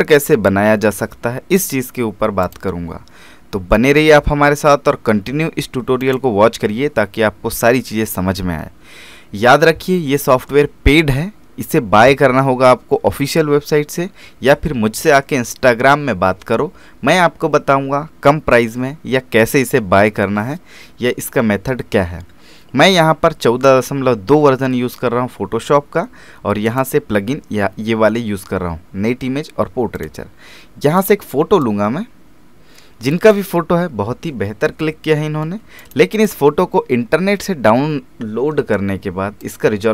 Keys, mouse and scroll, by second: 6.0 click, 26.6 click, 29.9-35.6 drag, 35.6 space, 35.8 right click, 36.1 space, 39.4-39.9 drag.